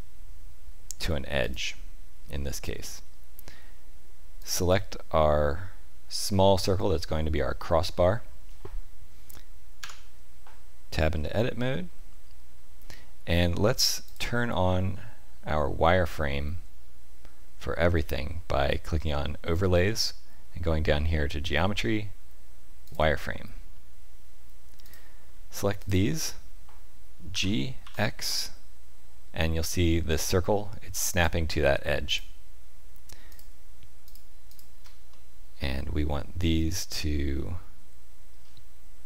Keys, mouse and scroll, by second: 4.4 click, 9.8 Tab, 11.2 middle click, 14.0 click, 24.8 click, 25.8 shift+click, 27.3 g, 32.0 click, 33.3 shift+click, 34.0 click, 35.1 middle click.